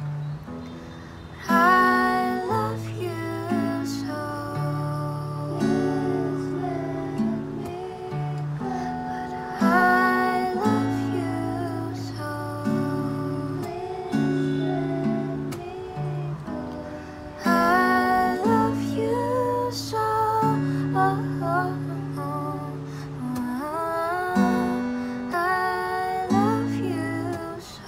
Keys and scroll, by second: 8.8 n, 19.8 F9, 26.2 F9.